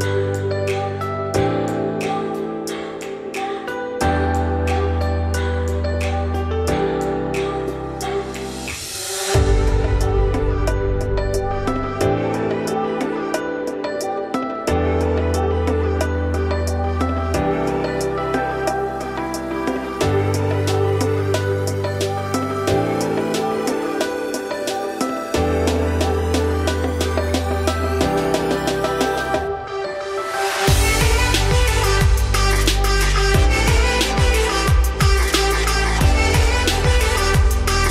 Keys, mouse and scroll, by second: 1.6 3, 1.8 click, 2.3 alt+click, 2.8 alt+click, 3.8 alt+click, 4.3 alt+click, 5.2 s, 7.5 scroll down 1, 7.6-10.3 middle drag, 10.3 Tab, 10.9-12.5 shift+middle drag, 12.5 Tab, 12.7 `, 13.3 1, 13.5 scroll up 2, 13.7 z, 14.1 click, 14.7 g, 17.0 z, 17.4-17.9 scroll down 2, 18.0 z, 18.5 click, 18.8 z, 19.4-21.1 shift+middle drag, 21.1 scroll up 1, 21.7 ctrl+b, 23.3-23.8 scroll up 2, 23.8 shift+middle click, 24.0 shift+scroll up 3, 24.2 2, 24.5 z, 25.0 click, 26.4 shift+click, 27.4 shift+click, 28.2 shift+click, 29.2 ctrl+b, 35.4 click, 36.7 shift+click, 37.2 scroll down 2, 37.4 middle click, 37.7 x.